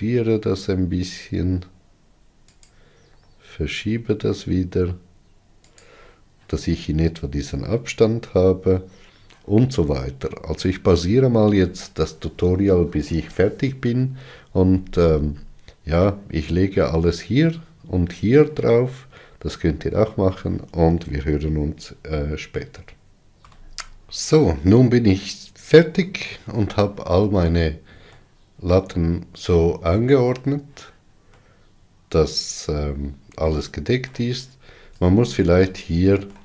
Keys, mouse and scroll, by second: 3.8 g, 15.8-16.3 scroll down 5, 24.1 click, 28.0-36.4 middle drag.